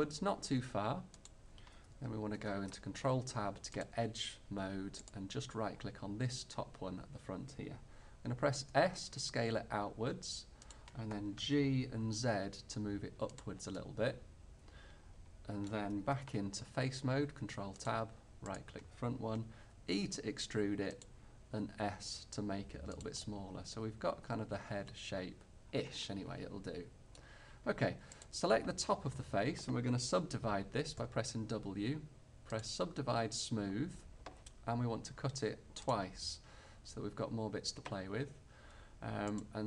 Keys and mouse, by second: 2.1 click, 2.4 ctrl+Tab, 8.8 s, 11.6 g, 16.3 ctrl+Tab, 18.6-19.6 middle drag, 19.8 e, 21.6 s, 28.3-30.1 middle drag, 31.1 w, 35.9-37.9 middle drag, 39.3-39.6 middle drag.